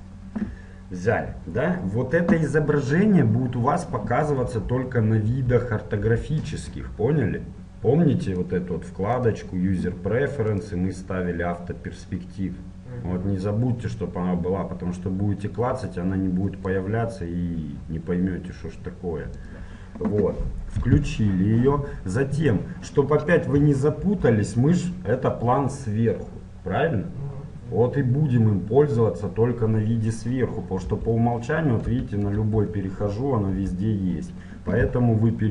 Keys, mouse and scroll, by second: 4.4 KP_7, 5.3 KP_1, 6.0 KP_7, 8.3-10.1 drag, 24.1 KP_7, 30.9 KP_1, 31.9 KP_3, 32.4 Up, 33.7 KP_7.